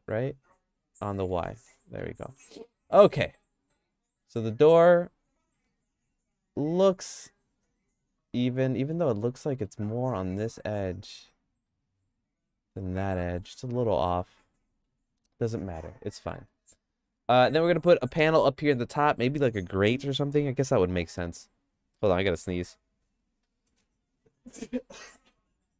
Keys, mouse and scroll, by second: 3.1 middle click, 3.5 click, 4.3 middle click, 5.0-8.9 shift+middle drag, 9.2 middle click, 11.7-14.8 middle drag, 15.7 middle click, 16.2 middle click, 16.6-17.6 shift+middle drag.